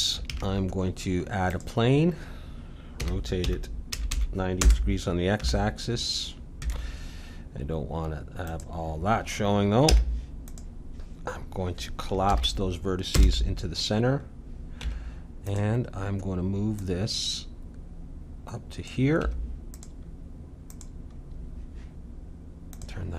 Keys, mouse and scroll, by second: 0.2 shift+a, 3.0 r, 5.3 Tab, 5.3 `, 8.4-10.4 drag, 9.8 Tab, 12.3 alt+m, 14.7 Tab, 16.7-18.6 drag, 19.2 Tab, 20.7-23.1 drag.